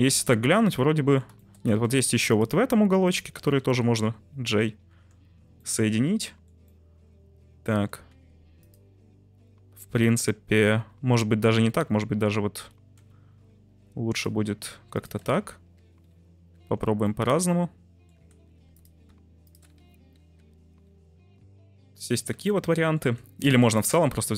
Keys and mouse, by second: 0.0-1.2 middle drag, 1.3 shift+middle drag, 1.7 Tab, 1.9 1, 3.0 shift+click, 4.3 j, 4.9 Tab, 5.7-6.4 middle drag, 6.8-7.7 middle drag, 7.7 Tab, 8.0 1, 10.7 ctrl+z, 11.0 ctrl+z, 13.6 1, 14.1 click, 16.1 j, 16.5 Tab, 17.1-18.0 middle drag, 18.1 Tab, 18.4 1, 18.7 right click, 20.7 j, 21.3 Tab, 21.9 Tab, 22.3 Tab, 22.5-23.0 middle drag, 23.0 Tab, 23.5 3, 23.8 click.